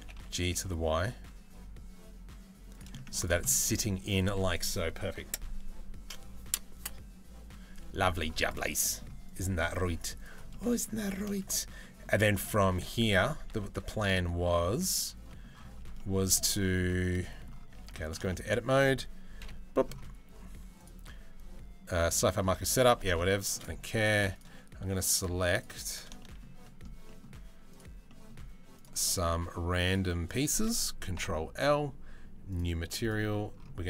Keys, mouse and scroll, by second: 2.5 middle click, 3.0 middle click, 8.5 middle click, 9.8 middle click, 10.1 middle click, 10.6 shift+middle click, 11.4 middle click, 11.9 shift+middle click, 12.3 Tab, 13.1 Tab, 13.5 middle click, 14.9 middle click, 15.6 middle click, 16.2 shift+middle click, 16.6 shift+middle click, 16.8 middle click, 17.0 click, 17.4 Tab, 17.5 middle click, 17.9 shift+middle click, 19.0 KP_Decimal, 21.7 middle click, 22.3 shift+middle click, 23.0 shift+middle click, 25.8 shift+middle click, 30.8 ctrl+l, 32.6-33.8 drag.